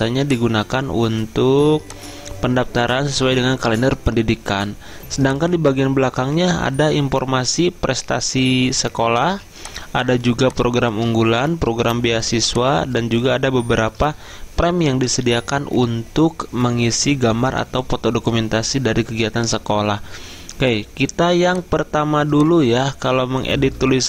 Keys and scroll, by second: 9.3 z.